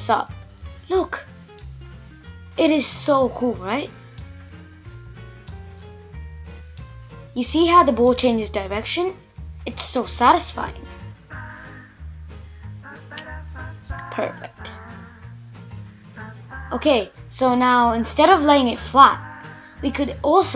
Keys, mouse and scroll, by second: 0.5-0.9 scroll up 1, 0.9-2.7 middle drag, 2.7-5.8 scroll down 1, 6.1-6.7 scroll down 1, 6.7-8.3 scroll down 1, 8.3-9.1 scroll down 1, 9.2 space, 9.7 click, 10.9-13.5 middle drag, 13.5 click, 14.2 Tab, 14.7 click, 15.7 Tab, 16.0 click, 16.5 click, 17.1 /, 17.4 /, 17.9 /, 18.7-19.2 scroll up 2, 19.2-20.0 middle drag, 20.0 Tab, 20.4-20.5 middle drag.